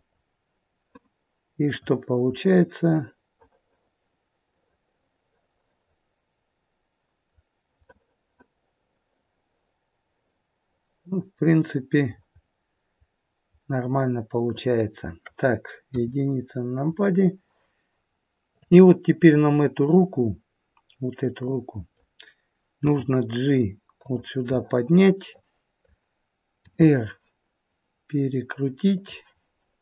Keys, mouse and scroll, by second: 1.7 click, 2.4 middle click, 7.8 middle click, 8.1 middle click, 12.3-13.0 scroll up 1, 13.0-13.5 scroll down 1, 13.5 middle click, 15.8 KP_1, 16.4-18.5 scroll down 2, 18.5 click, 18.5-18.9 scroll down 3, 19.8 click, 20.5-21.1 scroll down 2, 21.1 middle click, 22.8 g, 24.6 middle click, 26.6 r.